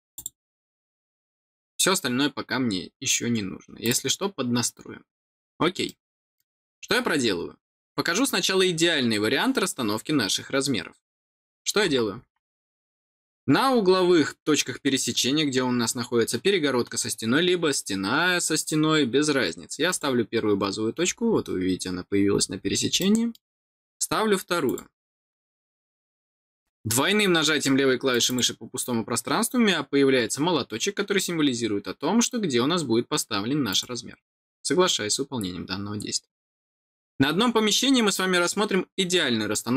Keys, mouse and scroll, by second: 0.1 click, 3.7 click, 5.8 middle click, 6.9 scroll down 1, 12.5 middle click, 13.7-14.1 scroll down 1, 19.8 click, 20.9-21.4 scroll down 1, 22.2 scroll down 1, 22.9 middle click, 24.6 click, 28.0 click, 28.2 click, 33.6 click.